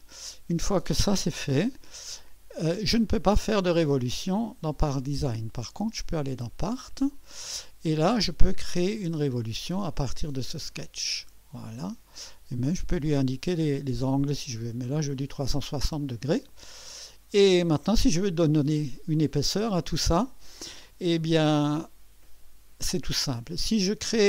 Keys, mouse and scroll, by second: 0.0 click, 1.3 1, 2.1 right click, 5.7-7.3 drag, 10.8 click, 14.4 click, 15.6-18.3 drag, 19.1 click, 20.6 click.